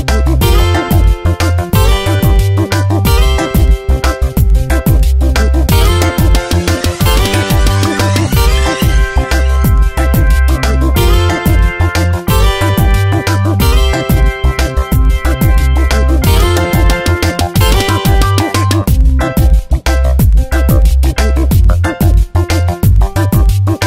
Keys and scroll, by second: 1.2 shift+Up, 3.2 space, 3.7 ctrl+t, 5.1 space, 14.2 ctrl+t, 20.9 Return, 21.3 v, 22.3 space, 23.2 Tab.